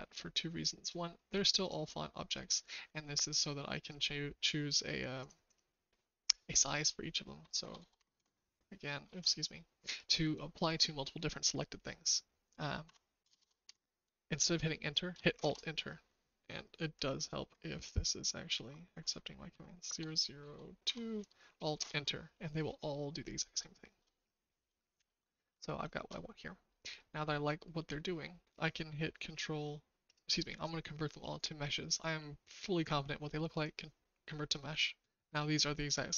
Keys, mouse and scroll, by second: 1.6 click, 3.8-5.2 drag, 5.4-22.4 drag, 7.7 KP_0, 9.0 ctrl+z, 12.8 KP_Decimal, 13.2 KP_0, 13.3 KP_0, 13.6 KP_2, 15.3 alt+Return, 22.9-23.9 shift+middle drag, 24.7 shift+middle click, 25.8 shift+middle click, 26.6 middle click, 30.0-33.6 right drag.